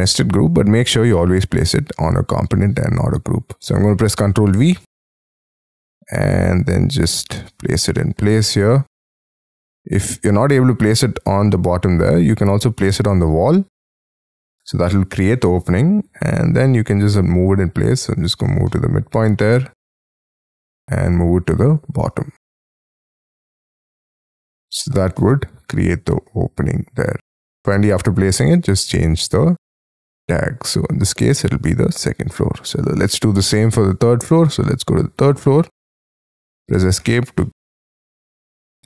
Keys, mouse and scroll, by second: 0.4-1.1 scroll down 6, 1.1 right click, 3.0-3.6 scroll down 6, 3.6 middle click, 4.6 ctrl+v, 7.7 scroll up 5, 8.0 middle click, 13.8 middle click, 15.3 m, 18.2 shift+click, 18.7 middle click, 19.6 scroll up 3, 23.6 middle click, 24.2 space, 24.3-24.7 scroll down 6, 24.7 middle click, 25.2 middle click, 27.3 space, 36.5 Escape, 36.7 Escape, 37.0 Escape, 37.3 middle click.